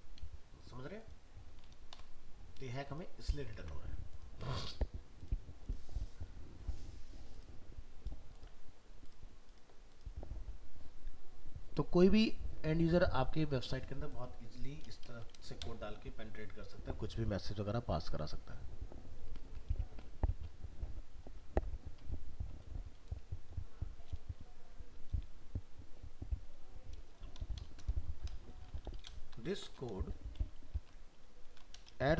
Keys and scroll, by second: 3.6 alt+Tab.